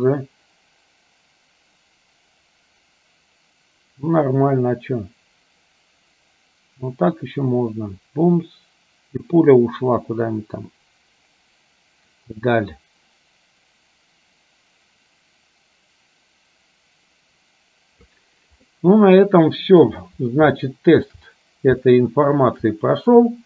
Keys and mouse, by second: 18.9-20.0 middle drag, 20.8 shift+middle click, 21.9 shift+middle click.